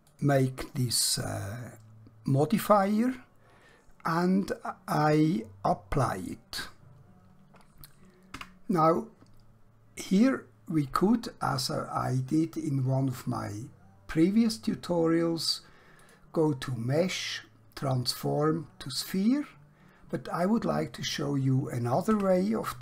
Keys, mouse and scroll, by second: 0.0 click, 6.2 click, 10.6 Tab, 16.0 click, 22.2 Tab.